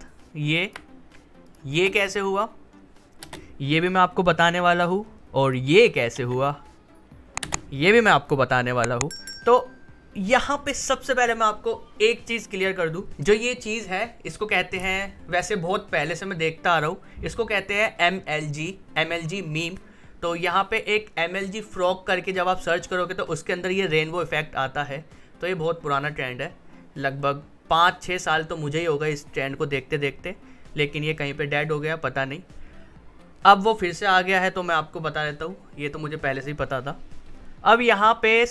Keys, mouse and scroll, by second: 1.7 space, 5.4 click, 6.1 space, 38.2 click.